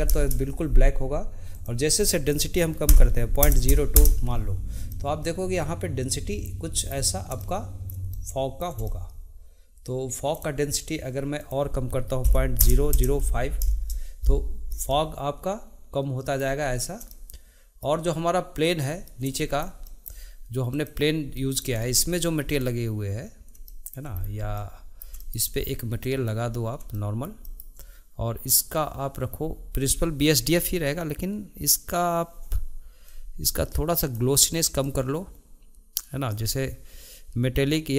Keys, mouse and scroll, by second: 5.0-7.0 middle drag, 7.0-7.5 scroll up 1, 7.5-11.5 shift+middle drag, 11.5-13.0 drag, 13.0 KP_0, 15.0-18.8 middle drag, 18.8 click, 19.5-20.8 shift+middle drag, 20.8 click, 21.5-22.6 middle drag, 22.6 click, 23.8-24.3 shift+middle drag, 24.3-24.7 scroll down 2, 24.7-26.2 middle drag, 26.2 click, 27.1-30.7 shift+middle drag, 33.2-37.9 drag.